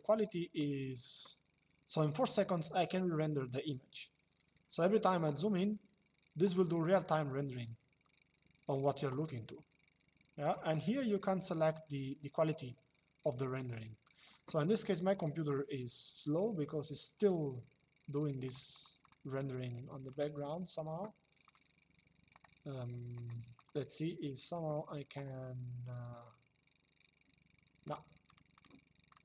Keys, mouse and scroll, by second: 14.6 click, 18.2 click, 21.1 click, 22.1 right click, 23.2 click, 27.6 click.